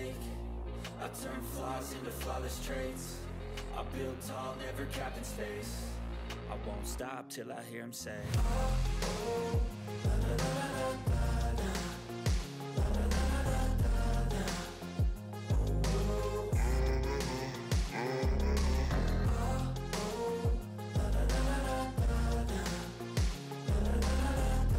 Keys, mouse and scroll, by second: 1.4 shift+click, 1.4 ctrl+g, 1.6 click, 1.9-2.2 ctrl+scroll down 1, 2.2 ctrl+middle click, 2.6 click, 3.7-4.4 drag, 4.7-6.1 typing, 7.7-9.1 drag, 14.3-14.8 click, 15.8-16.1 scroll down 1, 16.1 click, 18.0 ctrl+scroll up 1, 20.2-22.0 drag, 23.0 click, 23.6-23.9 ctrl+scroll down 1, 24.1 click, 24.6 ctrl+scroll up 1.